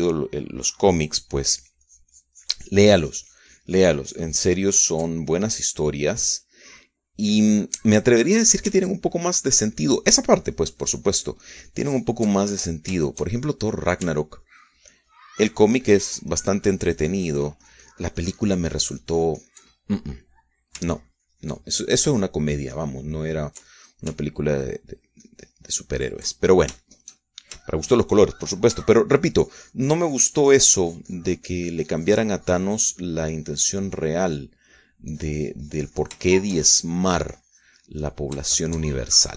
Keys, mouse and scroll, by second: 0.0-1.5 ctrl+drag, 1.6-2.8 ctrl+drag, 3.2-10.4 ctrl+drag, 10.4 ctrl+middle click, 10.6-14.6 ctrl+drag, 14.7 ctrl+shift+click, 15.1 ctrl+shift+middle click, 15.3 ctrl+shift+click, 15.7 ctrl+middle click, 15.9-22.4 ctrl+drag, 22.4 middle click, 22.5-29.3 ctrl+drag, 29.3 ctrl+shift+middle click, 29.4 ctrl+shift+click, 30.4 f, 30.9-36.5 drag, 36.8-39.3 drag.